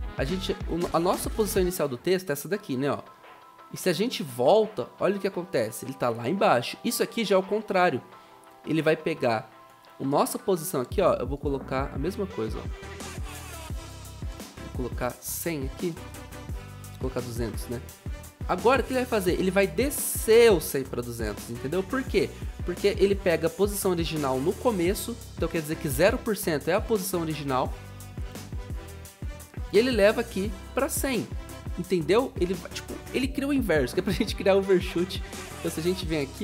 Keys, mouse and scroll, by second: 15.9-17.5 typing.